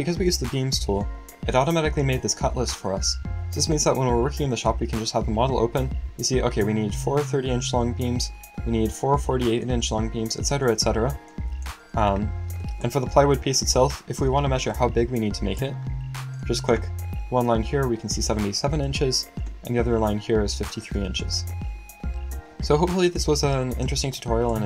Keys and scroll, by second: 20.0 space.